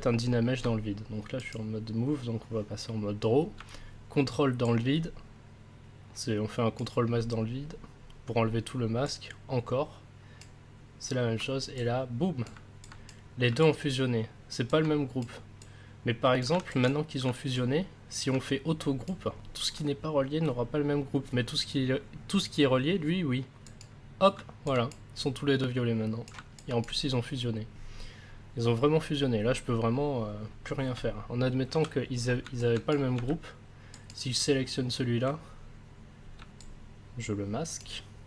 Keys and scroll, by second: 31.7 ctrl+z, 33.2 ctrl+s.